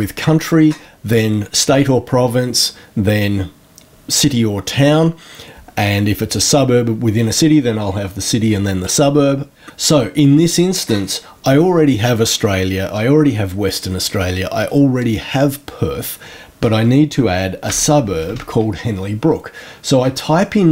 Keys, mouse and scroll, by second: 17.3-18.7 typing.